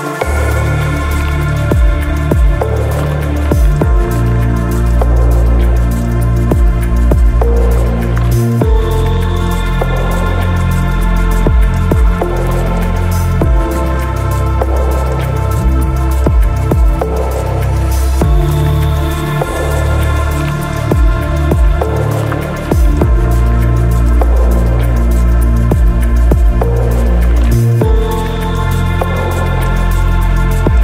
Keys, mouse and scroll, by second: 0.2 ctrl+click, 0.6 ctrl+click, 0.9 ctrl+click, 1.3 shift+middle click, 1.5 shift+click, 1.9 ctrl+z, 2.1 ctrl+click, 2.3 ctrl+shift+middle click, 2.8 shift+middle click, 3.1 ctrl+click, 3.3 shift+click, 4.3 ctrl+click, 4.6 ctrl+middle click, 4.7 ctrl+click, 4.9 ctrl+shift+click, 5.7 shift+click, 6.3 shift+click, 6.5 shift+middle click, 6.7 shift+click, 7.0 ctrl+shift+middle click, 7.7 shift+middle click, 7.8 middle click, 7.9 ctrl+click, 9.3 click, 10.6 middle click, 11.0 alt+z, 11.0 KP_9, 17.3 KP_0, 18.3 middle click, 18.5 click, 20.4 click, 21.3 middle click, 21.3 shift+KP_0, 22.1 click, 22.7 middle click, 24.4 click, 25.1 click, 25.2 KP_0, 26.2 click, 27.0 middle click, 29.7-30.8 typing, 30.4 shift+middle click.